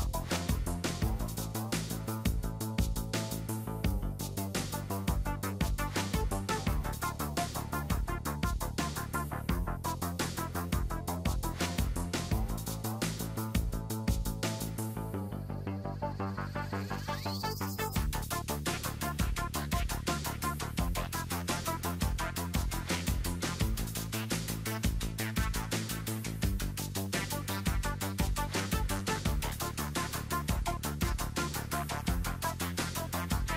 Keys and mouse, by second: 0.9 b, 2.4 KP_3, 4.0-5.9 drag, 7.5 right click, 8.3 e, 8.4 click, 10.1 KP_1, 11.6-13.4 drag, 14.6 KP_3, 15.3 e, 16.7 KP_1, 17.6-19.3 drag, 19.3 KP_3, 19.9 e, 21.4 KP_1, 22.5 click, 23.7 KP_3, 25.4 e, 27.1 b, 28.2 f, 28.4 a, 28.7 b, 29.6 KP_1, 30.9-32.2 drag, 32.7 z.